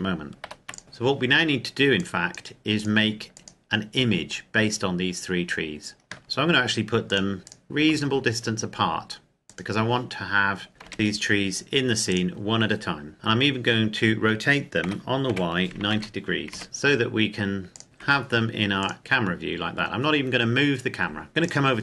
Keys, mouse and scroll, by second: 0.4 ctrl+s, 0.8 click, 0.9 scroll up 1, 1.1-2.0 scroll down 1, 2.0 click, 2.7 right click, 3.4 click, 6.1 click, 6.2 g, 7.1 click, 7.4 scroll down 1, 7.5 right click, 7.8 g, 9.5 click, 10.1-10.9 scroll up 1, 10.9 KP_0, 11.1-12.1 scroll down 1, 12.1 right click, 12.8-13.2 scroll down 2, 13.3-14.0 scroll up 1, 14.8 r, 15.3 y, 15.8 KP_9, 16.5 KP_Enter, 16.6 g, 17.7 click, 18.0 g, 18.8 click, 19.0 a, 19.1-21.3 scroll up 1, 21.3 scroll down 1, 21.4 click.